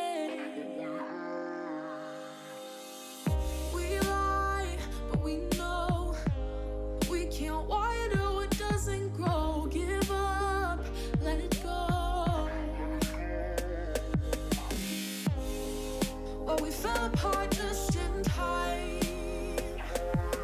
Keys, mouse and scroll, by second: 0.9 click, 1.8 click, 2.2 click, 3.0 click, 3.9 click, 5.8 click, 7.2 a, 7.8 shift+click, 8.8 click, 9.4 click, 11.0 click, 11.4 click, 12.2 click, 12.8 click, 13.3 click, 13.7 click, 14.4 click, 15.0 middle drag, 15.3 click, 15.6 click, 15.8 Tab, 16.1-17.4 middle drag, 17.4 ctrl+r, 20.1 middle click.